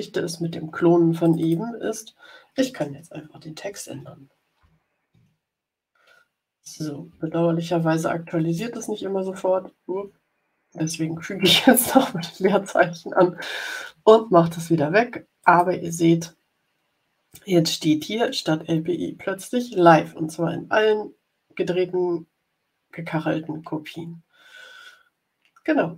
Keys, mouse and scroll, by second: 1.1 click, 3.5 BackSpace, 4.5 i, 5.0 v, 6.4 Right, 7.0 Right, 8.4 space, 9.8 BackSpace, 15.3 click, 20.1-20.6 scroll down 1, 21.8 scroll up 1.